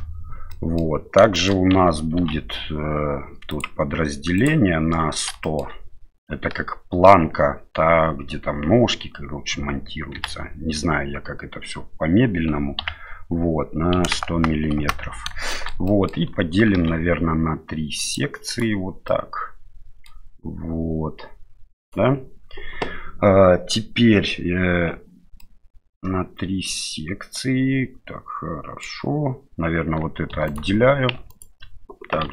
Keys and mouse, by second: 0.5 middle click, 1.3 shift+middle click, 2.2 ctrl+r, 5.4 shift+middle click, 10.1 g, 15.5 shift+middle click, 15.8 middle click, 16.7 ctrl+r, 19.1-20.2 middle drag, 21.8-25.4 right drag, 25.4-28.9 middle drag, 30.3 3, 30.5 right click, 32.2 p.